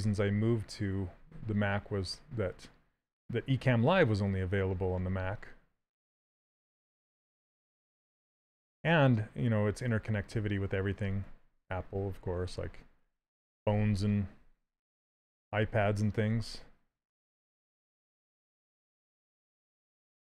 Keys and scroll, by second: 16.0 s.